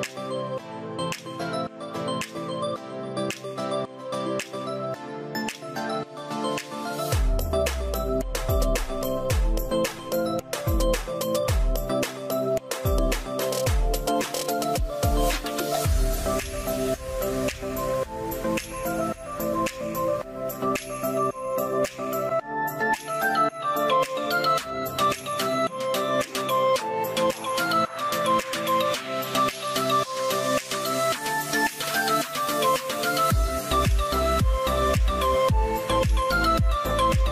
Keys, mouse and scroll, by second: 4.9 scroll, 5.0 Return, 11.6 1, 11.9 Return, 19.3 Return, 26.2 Return, 27.7 0, 28.3 0, 28.5 Return, 32.8 Return.